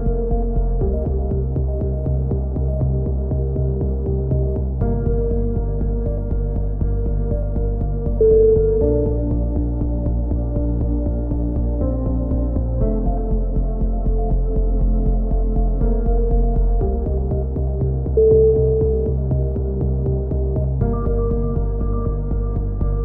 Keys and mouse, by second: 0.0 click, 2.4 a, 2.7 middle click, 3.7 middle click, 6.3-9.1 drag, 9.1 middle click, 9.3 click, 9.5-10.6 middle drag, 14.0-15.9 drag, 15.9 middle click, 17.1 ctrl+r, 19.0-20.3 middle drag, 20.3 right click, 20.9 right click, 21.1 click.